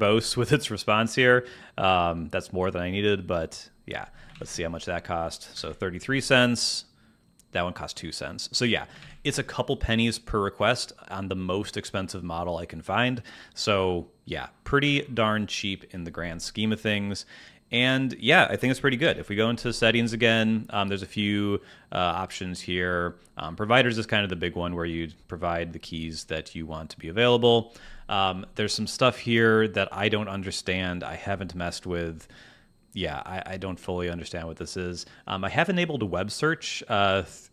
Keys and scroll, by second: 4.3 super+Tab, 5.5 super+r, 8.9 super+Tab, 19.0 super+,.